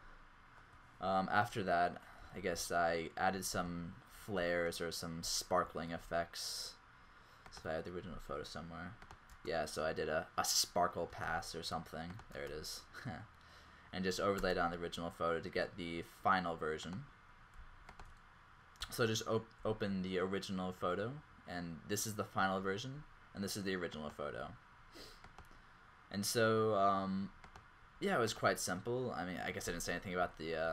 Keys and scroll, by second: 2.2 z, 7.8 Left, 9.5 space, 11.1 space, 12.3 space.